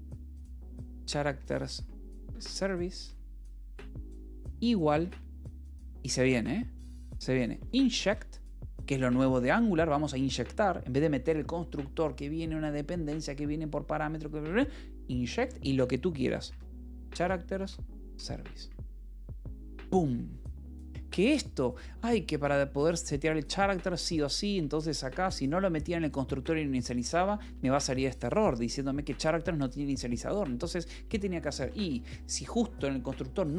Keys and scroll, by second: 0.0-5.1 typing, 7.0-8.6 typing, 9.2 Return, 16.3-17.4 typing, 17.9 Return, 18.4 Escape, 18.5-19.5 typing, 20.5 j, 23.5-25.0 typing, 27.0 Escape, 27.3 a, 27.4 BackSpace, 27.8 Escape, 30.7 a, 31.5 =, 31.7 space.